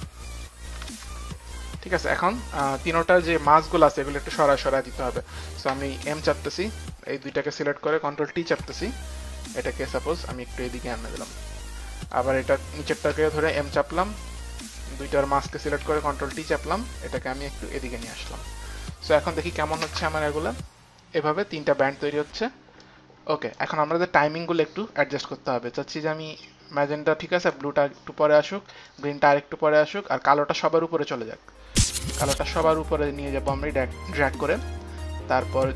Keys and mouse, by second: 0.7 Return, 2.3 Return, 3.9 Return, 4.8 Return, 5.7 m, 6.7 click, 6.7 m, 7.5 click, 7.5 m, 8.5 ctrl+t, 8.5 click, 8.5 m, 10.0 ctrl+t, 10.0 click, 12.0 ctrl+t, 12.0 click, 12.5 ctrl+t, 12.5 click, 12.6 click, 12.7 click, 13.1 m, 13.5 click, 13.5 m, 14.1 click, 15.0 shift+click, 15.0 m, 15.9 ctrl+t, 16.9 shift+click, 19.1 click, 19.8 space, 22.8 click, 26.4 click, 28.9 click, 32.0 click, 35.5 click.